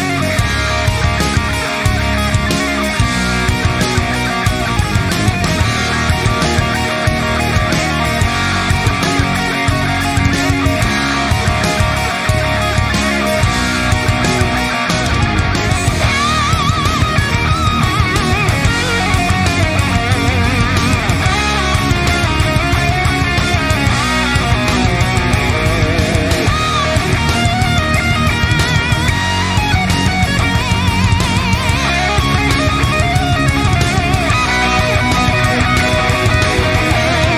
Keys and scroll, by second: 3.6 ctrl+0, 9.6 F12, 28.9 ], 33.6 ctrl+[, 34.2 ctrl+[, 34.9 ctrl+[.